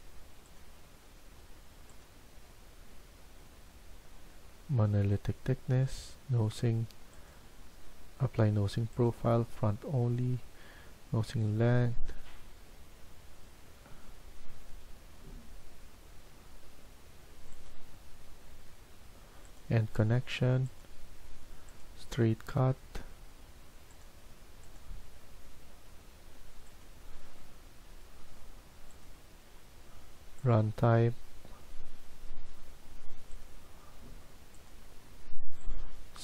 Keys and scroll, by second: 13.8 Escape, 14.4 Escape.